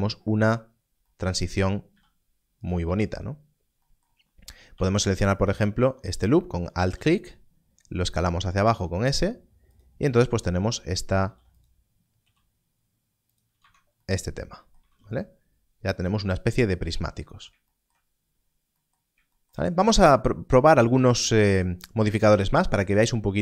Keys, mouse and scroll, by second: 1.4-1.8 scroll, 2.6 right click, 2.8 Tab, 4.7 2, 5.4 alt+click, 9.7 click, 11.2 ctrl+r, 13.3 click, 13.5 Tab, 14.8 alt+a, 18.1 scroll up 1.